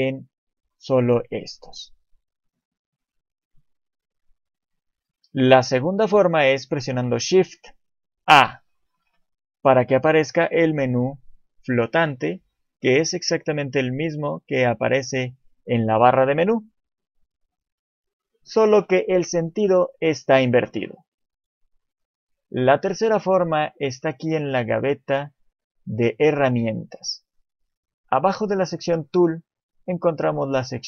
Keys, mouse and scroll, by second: 2.4 click, 8.3 shift+a, 22.3 click, 24.4 click, 28.2 click, 29.8 click.